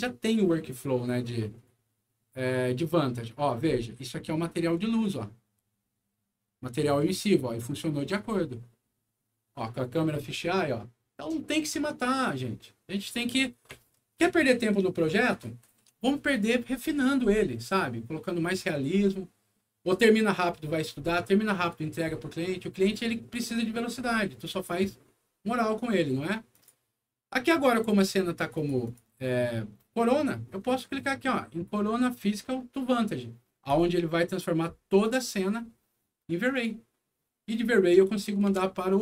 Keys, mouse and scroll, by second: 4.5 scroll up 2, 5.4 scroll up 2, 8.1-8.7 scroll down 4, 8.7 middle click, 26.4 click, 28.5 click, 28.8 click, 33.6 click, 36.4 click.